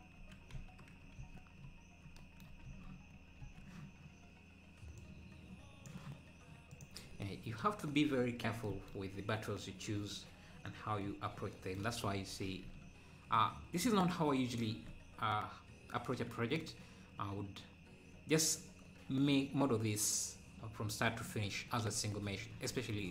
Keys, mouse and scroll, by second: 0.2 Tab, 1.6 z, 6.9 click, 12.5 scroll up 1, 14.3 scroll down 6.